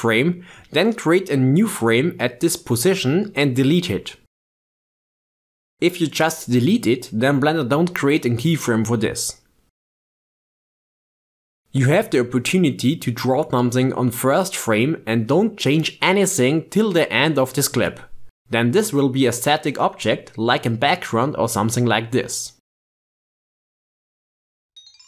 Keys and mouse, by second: 3.3 click, 3.7 x, 5.7 click, 7.4 click, 7.7 x, 11.9 ctrl+Tab, 12.7-22.2 drag.